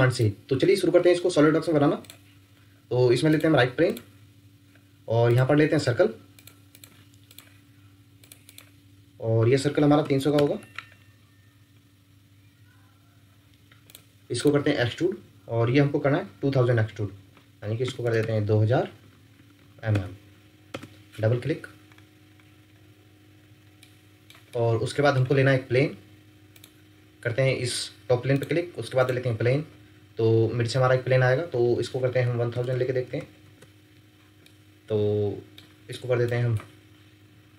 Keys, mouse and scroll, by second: 6.7 double click, 10.0 typing, 10.3 Return, 17.8-18.2 typing, 19.3 typing, 19.9 Return, 21.9-22.5 scroll up 1, 23.7 ctrl+scroll up 1, 23.8 ctrl+middle click, 24.5 middle click, 32.2-33.0 typing, 33.4 Return, 34.4 middle click, 37.3-37.5 typing.